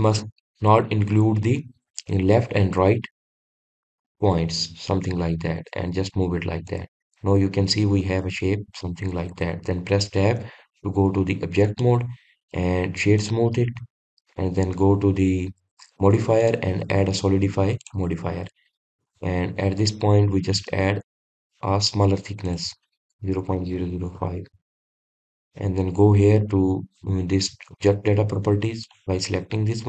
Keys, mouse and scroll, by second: 7.5 click, 7.9-11.1 middle drag, 11.9-13.3 middle drag, 13.3-17.3 right drag, 18.7-19.9 drag, 19.9-22.9 middle drag, 23.3 click, 24.5 KP_0, 26.0 click, 28.6 click, 29.7 click.